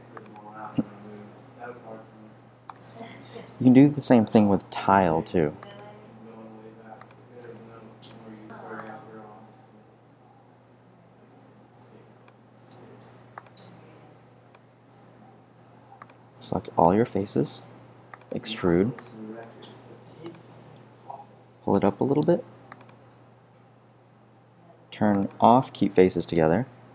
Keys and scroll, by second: 2.6 BackSpace, 6.4 r, 26.0 0, 26.1 Return.